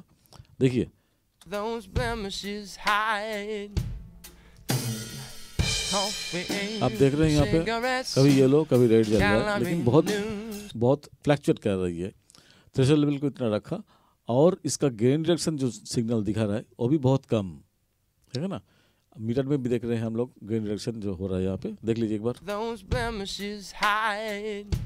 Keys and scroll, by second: 1.4 space, 10.7 space, 22.4 space.